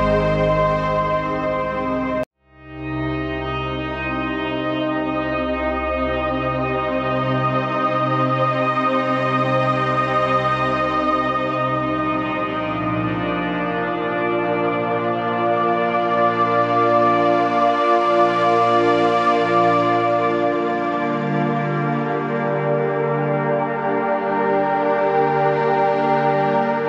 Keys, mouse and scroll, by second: 3.3 right click, 4.3 click, 8.2-10.2 alt+drag, 10.2 click, 10.9-11.6 typing, 11.1 click, 12.2 click, 13.3 click, 21.7 Left, 22.3 shift+Left, 24.4 click.